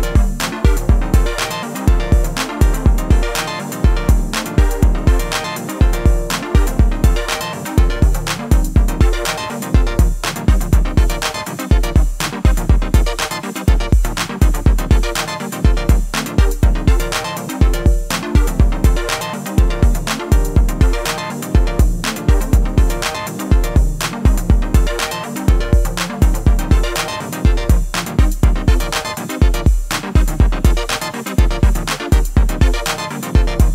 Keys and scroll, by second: 5.6 ctrl+a, 30.4 1, 30.9 3.